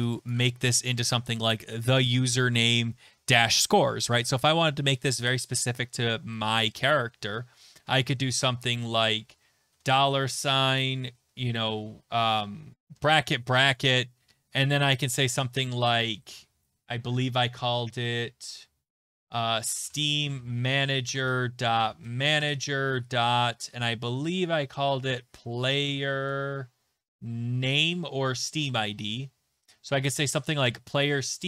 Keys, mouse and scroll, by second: 0.1 click, 0.3 click, 4.3 click, 6.3 click, 9.7-11.6 typing, 9.8 Right, 12.2 Left, 12.6 Left, 12.7 ctrl+z, 12.7 Delete, 12.7 click, 13.1 Left, 13.1 Right, 16.7-18.1 scroll, 18.9-19.6 scroll, 19.4-22.5 typing, 19.6 scroll, 19.8 click, 24.2 click, 24.3 click, 24.5-26.7 typing, 24.6 click, 28.8 middle click, 28.8 BackSpace, 29.9 Left, 29.9 scroll down 5, 29.9 middle click, 29.9 Down, 30.6 Return.